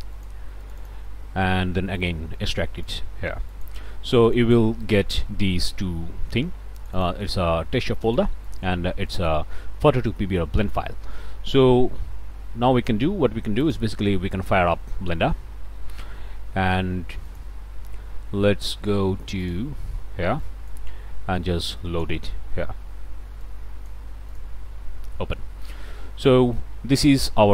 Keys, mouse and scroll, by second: 0.2 click, 0.5 middle click, 0.7 click, 1.9 right click, 2.9 click, 3.6 click, 4.3 click, 4.8-6.1 middle drag, 6.8 click, 7.3 middle click, 8.1 click, 8.5 click, 9.1 click, 13.7 click, 17.3-19.7 drag, 20.4-24.9 drag, 26.3 click, 26.8-27.3 scroll down 2.